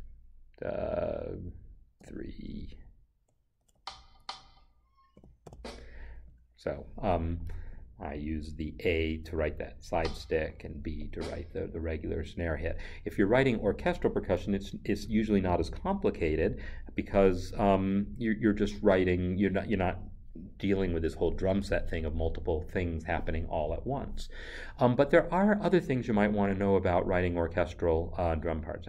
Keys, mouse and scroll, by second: 2.0 3, 3.6 a, 5.4 b, 9.8 click, 25.0 click.